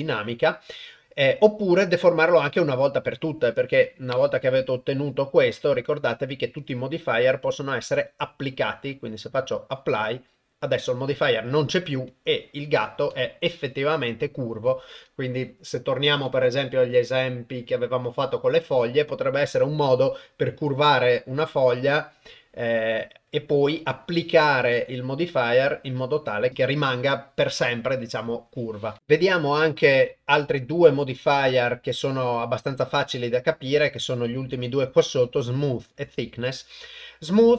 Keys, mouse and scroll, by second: 0.9-3.2 middle drag, 6.6-10.2 drag, 12.5 middle click, 13.1 Delete, 13.4-14.9 middle drag, 19.5-22.9 drag, 25.2 click, 25.9 click, 26.7-28.2 drag, 29.5-37.5 drag.